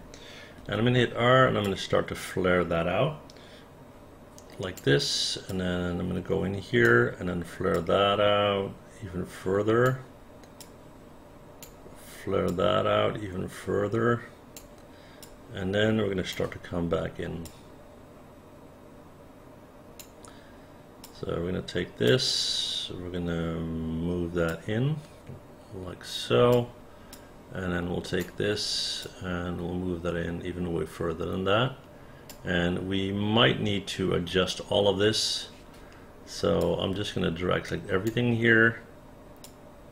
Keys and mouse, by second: 0.6 r, 1.7-4.8 drag, 5.5-6.8 drag, 7.7-9.8 drag, 10.6-11.6 drag, 12.5-14.6 drag, 15.2-16.3 drag, 17.5-20.0 drag, 21.0-22.1 drag, 24.5-26.5 drag, 27.1-28.2 drag, 29.0-32.3 drag, 36.6-38.1 drag, 39.4-39.9 drag.